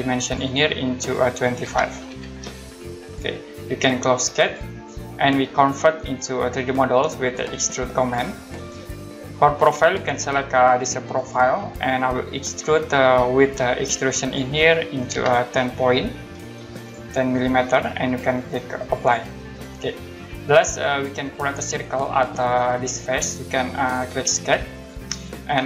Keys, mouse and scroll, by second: 0.2 click, 1.6-2.0 typing, 3.0 click, 8.0 click, 11.1 click, 13.5 click, 15.5-16.2 typing, 16.8 click, 19.0 click, 20.8 click, 24.7 click.